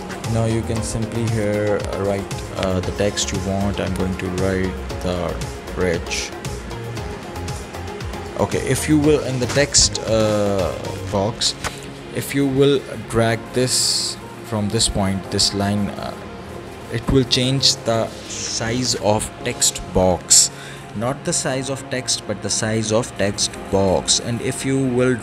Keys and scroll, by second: 3.6-6.4 typing.